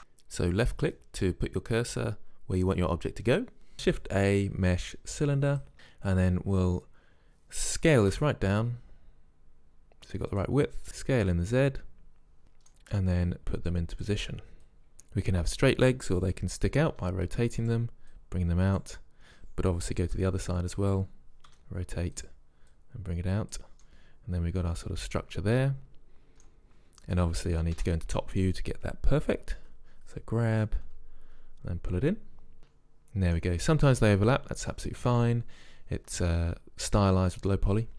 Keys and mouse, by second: 0.2-0.8 drag, 0.8 shift+a, 3.7 click, 8.2 s, 10.8 z, 13.1 KP_Decimal, 13.4-15.8 drag, 16.9 r, 18.1-19.8 drag, 20.1 KP_3, 21.5 r, 22.7-23.6 drag, 23.9 click, 27.8 KP_7, 29.6 z, 30.9 g, 32.6 z.